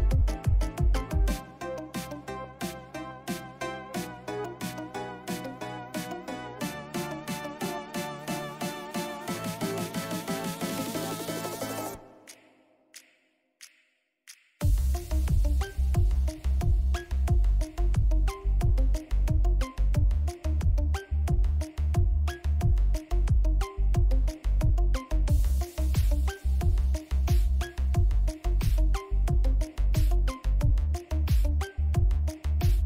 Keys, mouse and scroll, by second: 3.8-14.2 drag, 15.7 x, 16.8 x, 17.5 click, 18.2 ctrl+z, 18.9-23.9 drag, 24.1 x, 24.9-27.4 drag, 27.4 ctrl+-, 29.7 click.